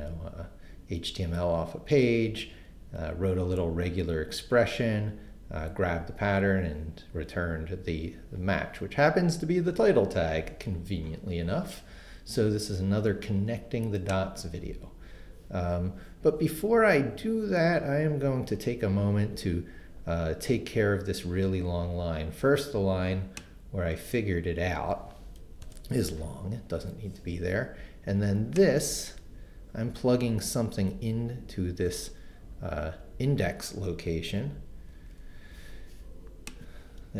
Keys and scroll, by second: 25.6 BackSpace, 34.9 super+x.